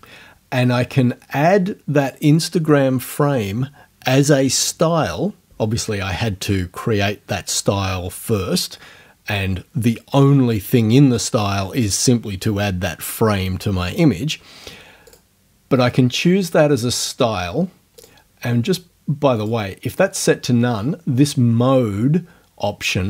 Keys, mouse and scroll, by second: 2.0 click, 15.1 click, 18.0 click, 19.4 click.